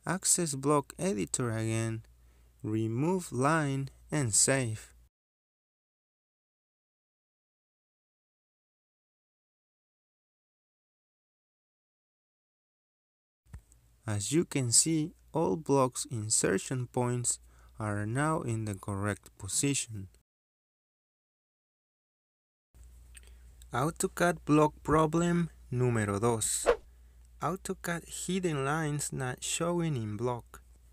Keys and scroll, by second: 1.1 Escape, 6.6 m, 6.8 space, 12.9 Delete, 24.3 ctrl+z, 24.5 Escape.